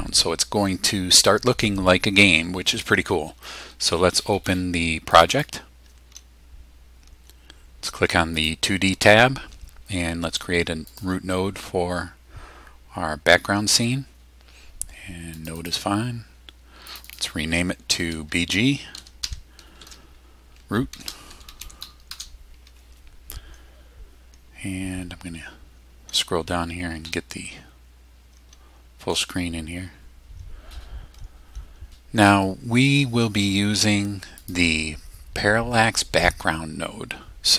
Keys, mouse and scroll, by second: 5.2 click, 8.4 click, 10.9 click, 15.3 click, 16.9 click, 18.7-22.1 typing, 24.9-25.5 scroll down 2, 25.6 scroll down 2, 26.4 scroll down 2, 27.0 middle click, 34.4 click.